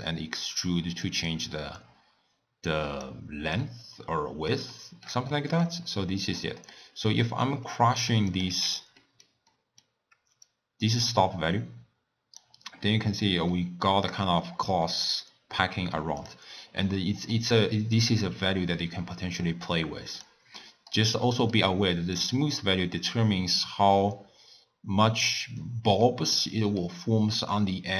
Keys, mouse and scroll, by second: 0.0-3.0 drag, 3.7-5.8 middle drag, 5.8-6.4 scroll down 3, 6.4-8.1 middle drag, 8.1 click, 8.3 click, 8.7 x, 9.0-10.5 middle drag, 10.5-12.7 drag, 12.7 scroll down 1, 12.9-13.6 scroll up 5, 13.6-14.3 middle drag, 14.3 scroll down 1, 14.9-16.2 middle drag, 16.2 click, 16.9-18.0 middle drag, 18.0-20.6 drag, 20.6-22.2 middle drag, 22.2-25.2 drag, 26.1-27.1 middle drag, 27.1-27.6 scroll up 2, 27.6-27.9 middle drag.